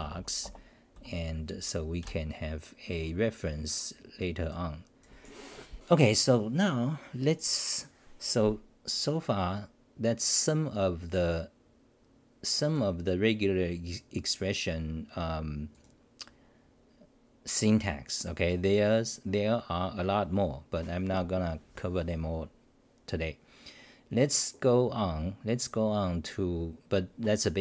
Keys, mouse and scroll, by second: 0.5 Return, 0.9 k.